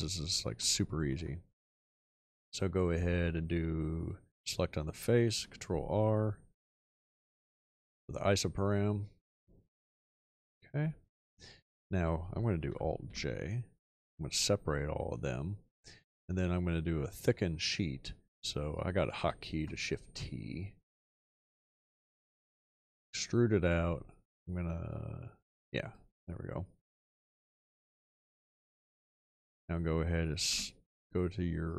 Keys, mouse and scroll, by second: 5.3 ctrl+r, 13.1 alt+j, 19.1 shift+t, 30.5 2.